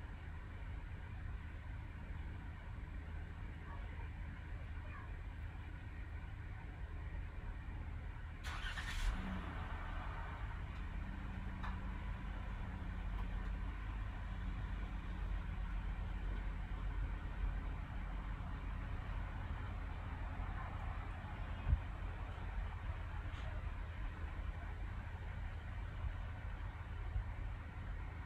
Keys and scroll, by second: 16.0 Caps_Lock, 16.9 typing, 18.7-20.8 typing, 24.2-25.0 typing.